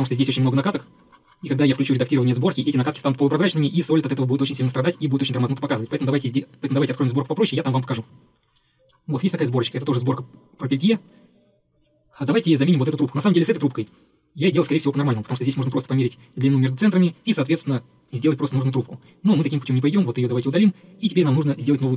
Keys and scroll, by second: 19.5 Delete.